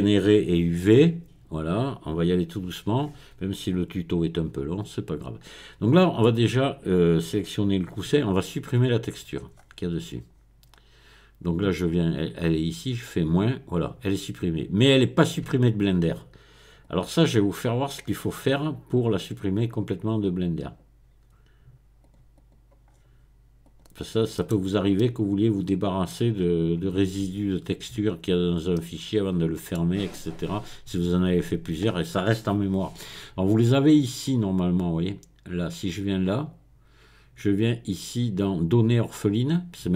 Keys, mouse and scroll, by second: 7.0 click, 9.0 click, 9.6-10.3 scroll up 1, 10.3-10.6 scroll down 1, 10.6-11.4 scroll up 1, 13.2 click, 16.8-18.6 drag, 19.6 right click, 20.6 right click, 22.0 click, 22.8-23.6 scroll down 1, 23.6 click, 24.4 middle click, 25.0-26.4 middle drag, 26.4-27.0 scroll up 1, 27.0 scroll up 1, 28.8-30.1 middle drag, 36.3 click.